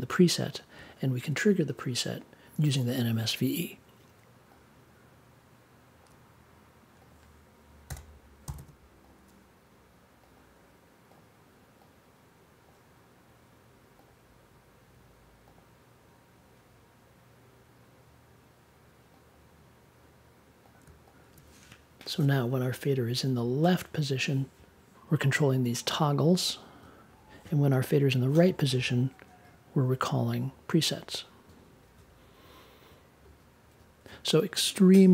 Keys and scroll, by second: 7.8 n, 8.4 g.